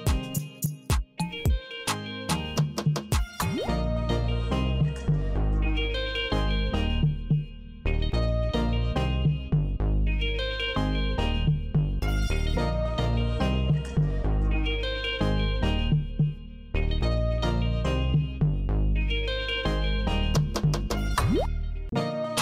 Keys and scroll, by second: 0.0 Return, 1.5 Return, 4.3 Return, 6.1 F5, 8.1 shift+Tab, 10.1 Left, 11.7 alt+e, 13.4 n, 15.0 k, 20.1 Return, 21.8 Tab.